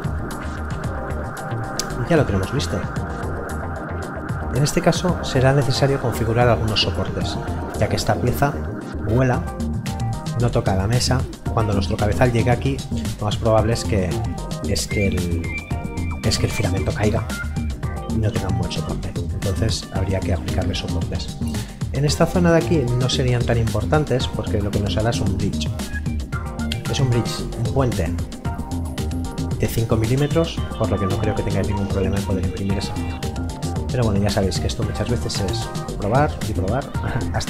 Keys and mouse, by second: 3.6 right click, 19.5 right click, 22.6 right click, 26.3 right click, 32.4 right click.